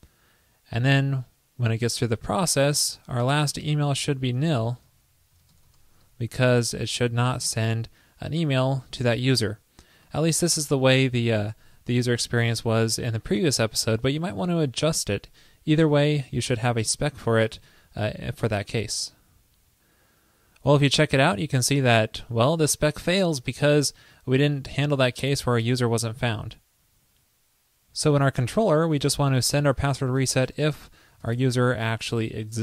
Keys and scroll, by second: 4.7 shift+super+Right, 17.8 super+s.